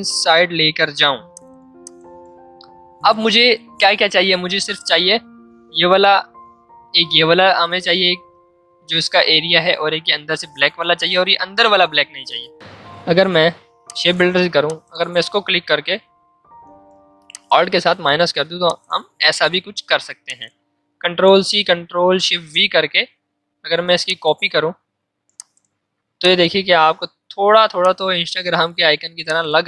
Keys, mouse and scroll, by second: 12.6 ctrl+z, 13.8 click, 14.6 super+click, 16.6 ctrl+z, 17.3 alt+click, 18.2 v, 18.6 click, 21.0 ctrl+c, 22.2 ctrl+shift+v, 24.0-29.6 shift+drag.